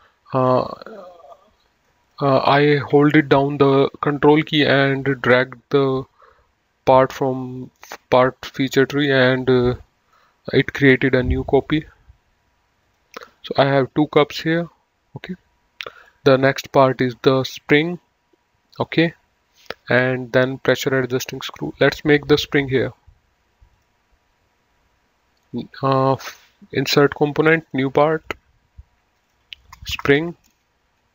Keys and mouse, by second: 0.1 click, 1.2 middle click, 2.3 click, 4.7 ctrl+click, 10.2 right click, 11.9 click, 13.2 click, 14.6 middle click, 16.3 click, 23.9 click, 27.3 click, 29.8 F2, 30.3-31.1 typing.